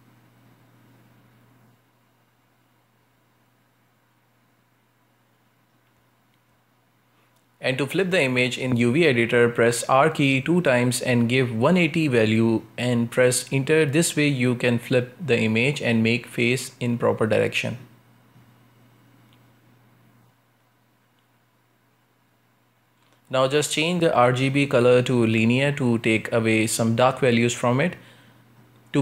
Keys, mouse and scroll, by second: 0.0 ctrl+space, 0.5 scroll up 2, 2.3 r, 5.8 scroll up 1, 6.2 middle click, 7.1 scroll up 2, 8.1 r, 11.0 scroll down 1, 11.2-12.7 shift+middle drag, 12.7 Tab, 13.8 Tab, 14.4 r, 16.6 Tab, 17.4-22.4 shift+middle drag, 22.4-24.3 drag, 24.3-25.5 middle drag, 25.5-25.9 scroll down 2, 25.9-27.7 shift+middle drag, 27.7-28.5 scroll down 1, 28.5 click, 28.9 middle click.